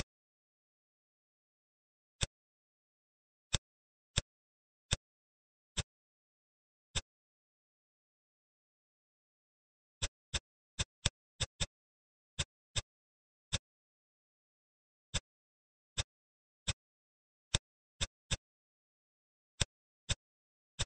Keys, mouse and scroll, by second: 0.3 Tab, 0.6-2.0 scroll up 6, 2.0 click, 3.3-4.8 drag, 6.8-8.4 drag, 8.9-9.8 scroll down 5, 9.8 click, 10.6 shift+click, 10.9 shift+click, 11.2 shift+click, 11.4 shift+click, 12.2 shift+click, 12.6 shift+click, 13.3 shift+click, 15.0 middle click, 15.7 shift+click, 16.5 click, 17.8 shift+click, 18.2-19.5 middle drag, 19.5-20.6 drag.